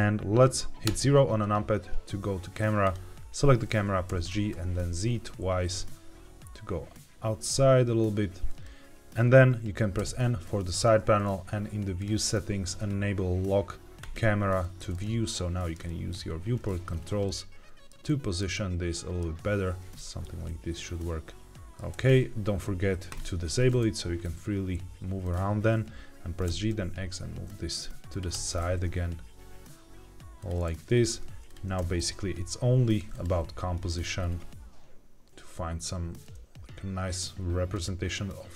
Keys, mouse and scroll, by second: 0.8 KP_0, 2.7 click, 4.0 g, 4.2 z, 8.4-9.9 drag, 9.9 n, 11.9-14.0 drag, 14.9-15.7 middle drag, 16.1-16.5 shift+scroll down 2, 16.6 shift+middle click, 17.2 middle click, 18.0 shift+middle click, 19.6 scroll up 1, 20.4-21.6 middle drag, 21.6 scroll down 1, 23.0 click, 25.1 click, 26.4 g, 26.6 x, 28.0 click, 28.2 g, 28.5 shift+z, 30.3 click, 30.8 click, 31.4 shift+click, 31.7 g, 32.0 y, 33.0 click, 33.2 g, 33.8 shift+z, 37.6 click.